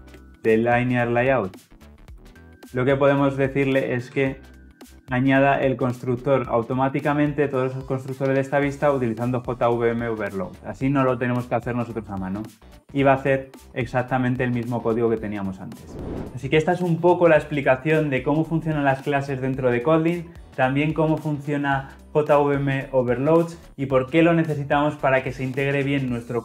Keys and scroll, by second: 1.2 Return, 4.0 alt+Return.